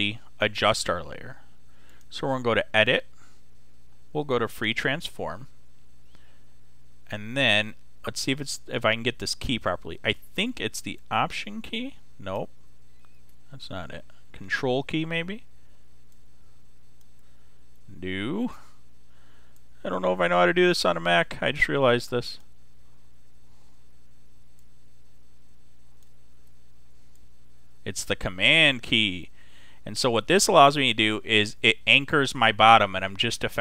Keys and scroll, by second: 13.0 alt+super+z.